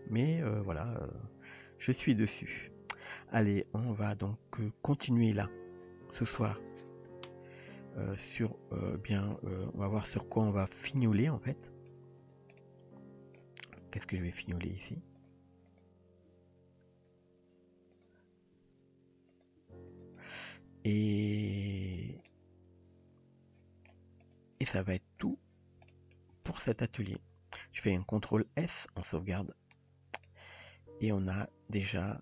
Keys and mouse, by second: 7.7-10.2 middle drag, 10.7-11.0 middle drag, 11.6 shift+middle drag, 12.2 click, 12.6-13.4 middle drag, 13.9 middle click, 14.4 g, 15.8 click, 16.3 g, 18.5 r, 19.6 g, 20.2-21.1 middle drag, 21.6 Tab, 22.3-23.9 middle drag, 25.2 click, 25.9 shift+middle drag, 26.5-27.0 middle drag, 28.3 ctrl+s, 29.4-29.8 shift+middle drag, 30.3-32.2 middle drag.